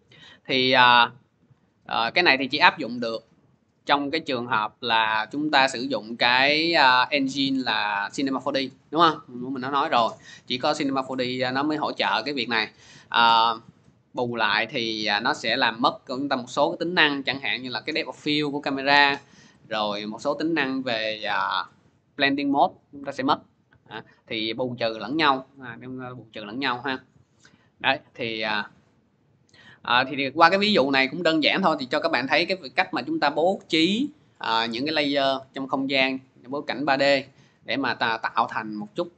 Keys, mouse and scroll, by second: 3.8 click, 4.6 click, 5.5 middle click, 7.5 click, 9.6 scroll, 9.7-10.2 scroll down 1, 11.5 click, 13.1 middle click, 15.0 click, 19.6 click, 20.9 F4, 23.5-24.6 drag, 25.6 F4, 27.8 scroll down 4, 27.9-28.4 scroll, 28.5 click, 29.0 click.